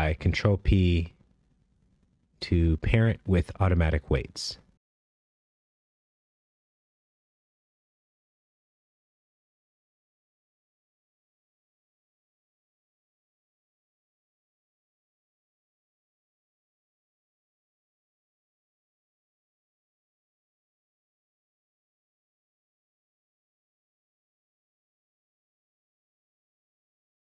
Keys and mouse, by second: 3.9 ctrl+p, 6.1 click, 9.6 Tab, 11.0 Tab, 12.0 ctrl+Tab, 13.0-13.9 drag, 14.9 r, 18.2 g, 19.3 right click, 25.4 click.